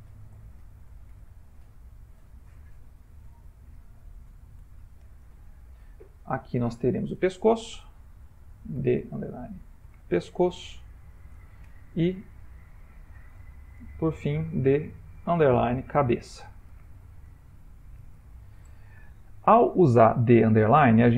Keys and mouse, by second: 3.1 Left, 3.2 Left, 3.9 Left, 6.5 click, 7.6 F2, 12.8 click, 13.9 F2, 21.0 click.